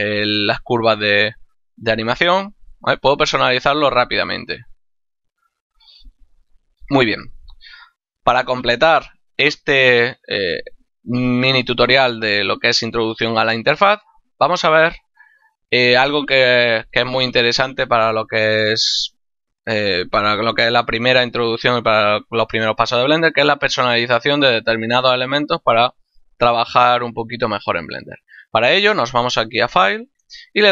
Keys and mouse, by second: 3.9 click, 29.7 click.